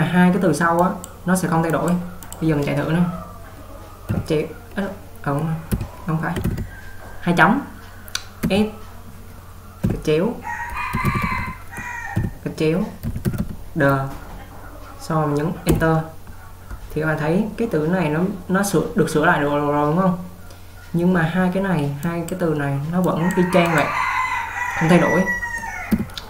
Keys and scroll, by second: 4.2 /, 6.5 typing, 8.5 typing, 9.9 typing, 26.0 u.